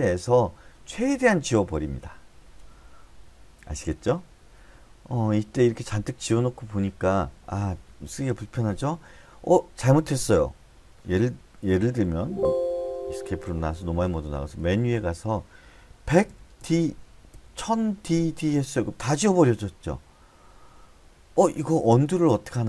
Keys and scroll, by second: 12.5 Escape, 14.5-17.2 typing, 18.5 d, 18.8 d.